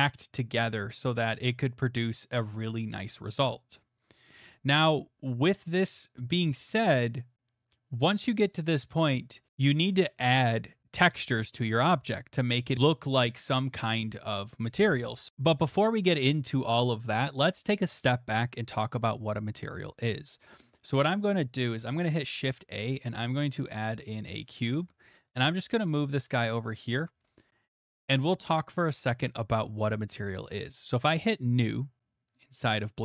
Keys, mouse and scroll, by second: 3.0-4.1 scroll, 4.9-7.6 middle drag, 6.7 Tab, 15.5 middle click, 16.3 middle click, 20.9 middle click, 21.2 middle click, 21.3 middle click, 21.7 middle click, 21.8 shift+a, 22.6 click, 24.2 click, 24.7 g, 25.3 shift+z, 26.1 click, 26.9 shift+middle click, 27.3 middle click, 27.5 shift+middle click, 27.6 shift+middle click, 27.7 middle click, 28.3 middle click, 29.9 shift+middle click, 31.3 click, 31.8 click.